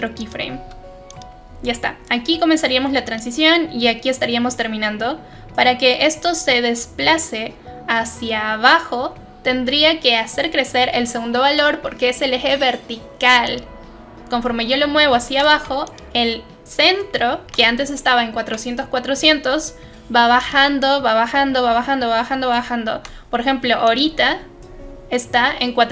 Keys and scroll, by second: 15.2 ctrl+z, 17.4 ctrl+z, 22.9 ctrl+z.